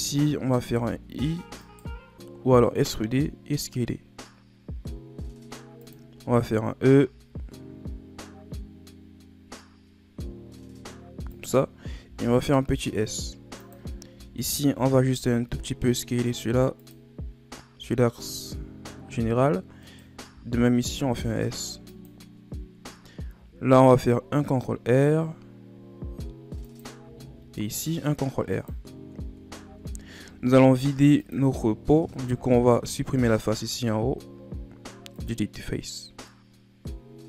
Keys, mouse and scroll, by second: 0.7 e, 2.9 s, 6.3 e, 12.1 s, 14.4 alt+right click, 15.2 s, 19.8 alt+right click, 20.7 s, 23.4 ctrl+r, 27.2 ctrl+r, 29.2 Tab, 29.6 Tab, 30.4 ctrl+Tab, 32.2 right click, 33.4 x, 35.9 middle click, 35.9-36.3 scroll down 3, 36.3-37.2 middle drag.